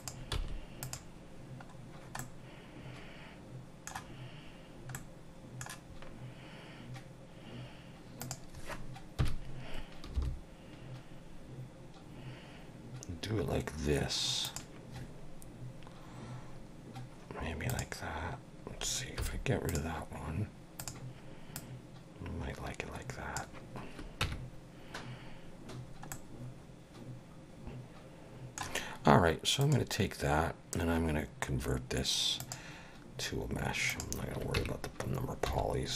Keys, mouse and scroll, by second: 0.0 click, 0.3 x, 2.2 middle click, 4.9 middle click, 7.1-7.8 scroll down 1, 8.2 click, 9.2 KP_1, 10.1 g, 17.7 click, 19.2 x, 21.5 click, 24.2 Tab, 26.1 middle click, 29.6 click, 34.6 Tab, 35.5 1.